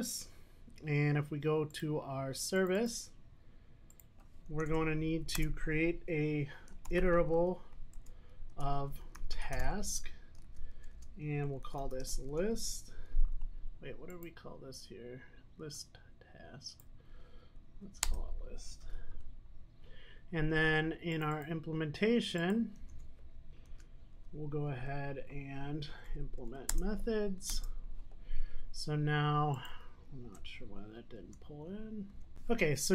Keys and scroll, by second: 8.0 Return, 18.9 super+s, 23.8 super+n, 30.1 alt+Return.